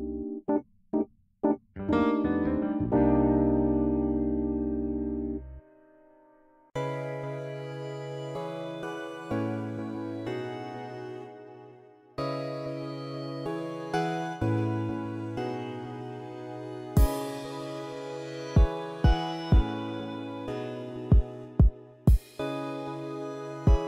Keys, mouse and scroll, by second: 0.7-1.1 middle drag, 2.7 click, 5.7 middle click, 6.0 middle click, 6.9 click, 10.5 middle click, 14.4 middle click, 15.4 click, 19.7 click, 21.1 KP_8, 21.4 KP_0, 22.3 Return.